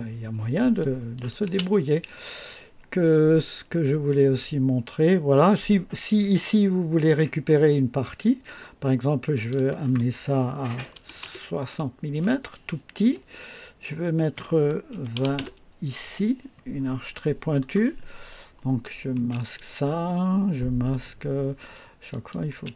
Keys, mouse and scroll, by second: 1.1 click, 1.4 space, 9.3 click, 10.6 KP_6, 11.1 KP_0, 11.2 KP_Enter, 14.8 KP_2, 15.1 KP_0, 15.3 KP_Enter, 16.7-17.0 scroll up 1, 17.1-17.7 right drag, 19.0 space, 22.0 click, 22.4 space.